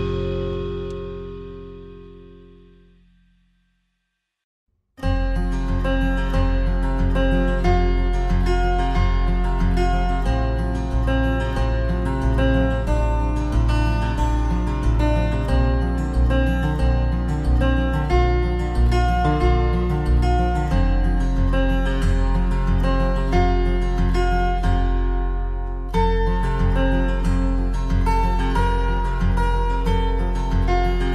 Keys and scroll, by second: 23.7 Right, 25.0 ctrl+[, 27.1 ctrl+c, 27.3 ctrl+v.